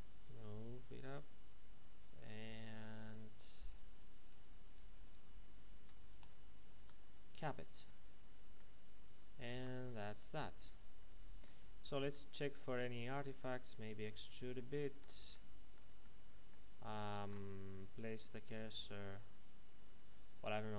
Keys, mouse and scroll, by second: 2.4 right click, 3.3 right click, 6.2 f, 6.7 Tab, 7.4 middle click, 9.0-9.4 scroll down 1, 9.6 ctrl+s, 9.7 click, 10.6-11.2 scroll down 1, 13.7 Tab, 14.5 middle click, 17.3 ctrl+Tab, 17.6 click.